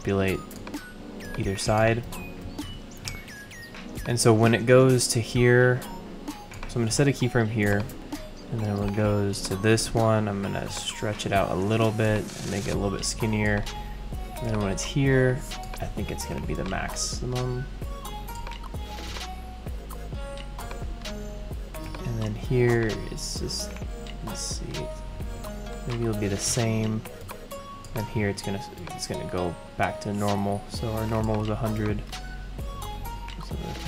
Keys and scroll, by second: 2.0 super+z.